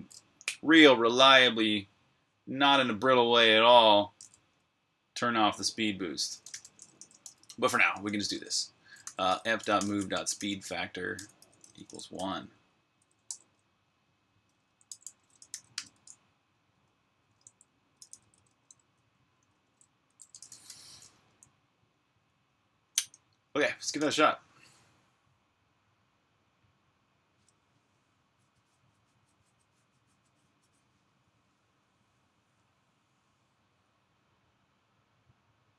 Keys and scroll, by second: 5.9-7.5 typing, 8.1 Return, 8.9-16.5 typing, 17.6-21.0 typing, 23.7-25.4 typing.